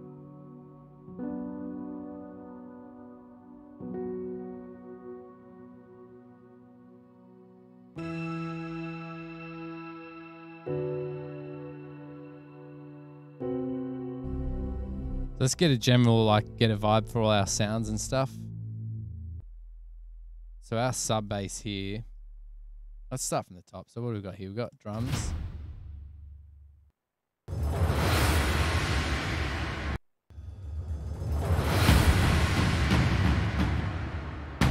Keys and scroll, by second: 0.5 super+=, 0.9 super+[, 2.5 ctrl+alt+super+Up, 9.0 super+], 9.1 super+], 9.7 super+[, 10.3 super+], 11.9 super+], 11.9 super+=, 21.3 super+=, 23.4 space, 24.9 s, 25.0 space, 27.0 space, 27.6 space, 30.1 space, 30.3 space, 31.1 super+=.